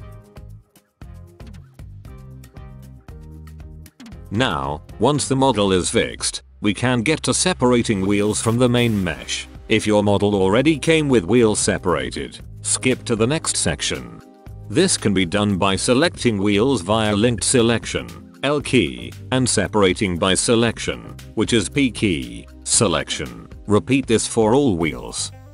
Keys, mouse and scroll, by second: 0.0 click, 0.7 l, 2.0 l, 2.7 click, 3.0 right click, 3.3 l, 3.8 x, 4.2 right click, 4.8 x, 4.8 l, 5.0 click, 5.3 click, 5.6 click, 6.1 l, 6.1 x, 6.4 click, 6.8 l, 7.0 x, 7.3-7.7 drag, 7.9 shift+click, 8.6 click, 8.9 middle click, 9.1 a, 9.3 a, 9.4 Tab, 9.7-10.3 middle drag, 10.3-12.8 drag, 13.0 Tab, 13.3 click, 13.8 middle drag, 16.0-17.4 middle drag, 18.0 l, 20.9 middle click, 24.0-24.6 middle drag.